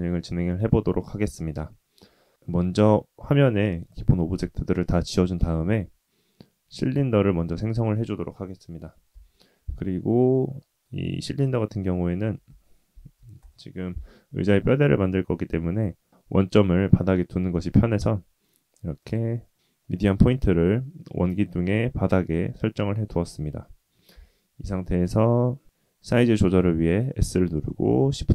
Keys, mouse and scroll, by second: 2.3 shift+a, 5.3 shift+a, 9.1 KP_1, 9.9-10.4 scroll up 3, 10.5 shift+middle drag, 12.2 g, 15.0-19.1 drag, 19.5 middle click, 20.9-22.3 middle drag, 22.7-23.9 middle drag, 24.1 KP_1, 25.6 s.